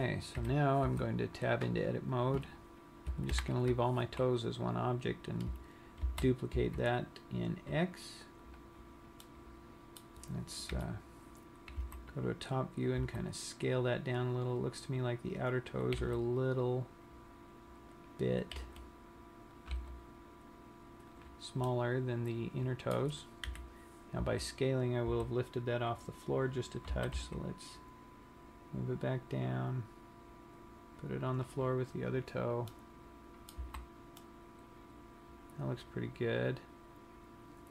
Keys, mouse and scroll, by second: 0.4 KP_1, 1.2 Tab, 2.6 click, 3.7 ctrl+l, 6.4 shift+d, 9.0 click, 9.8 middle click, 11.0 KP_7, 12.2 z, 13.4 s, 16.2 click, 16.3 r, 18.7 click, 19.3 r, 20.2 click, 20.2 g, 21.6 click, 22.0 middle click, 23.8 KP_3, 24.7 z, 26.0-27.0 scroll up 5, 26.0 z, 27.4 g, 31.8 click, 32.5 scroll down 1, 33.2 middle click, 33.9 z, 34.5 middle click.